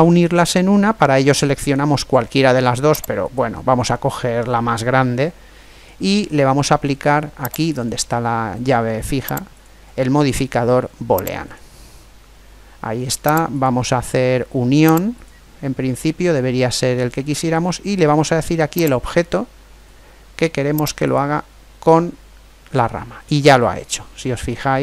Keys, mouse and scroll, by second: 1.4-3.0 middle drag, 3.0 right click, 7.4-11.0 drag, 11.0 click, 13.2 click, 18.8 click, 23.0-24.8 middle drag.